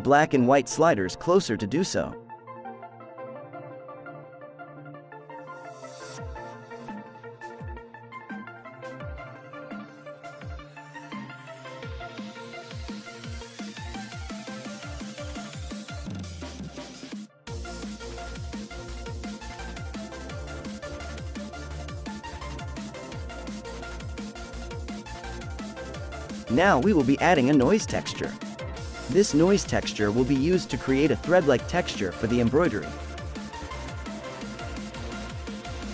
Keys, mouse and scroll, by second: 3.3-4.5 scroll up 5, 4.5-5.3 shift+middle drag, 5.3-6.5 scroll up 1, 6.5-15.7 drag, 15.7-16.3 scroll down 2, 16.3-17.0 scroll down 5, 17.0-18.1 scroll up 7, 18.1-19.0 scroll down 10, 19.0-19.6 scroll up 1, 19.6-21.6 shift+middle drag, 21.6-22.3 scroll down 1, 22.3 middle click, 22.7 shift+a, 28.6-29.8 scroll up 9, 29.8-30.6 middle drag, 30.6 ctrl+shift+click, 32.0-33.6 scroll up 1, 33.6 scroll down 4, 34.3 scroll down 1, 35.8 click.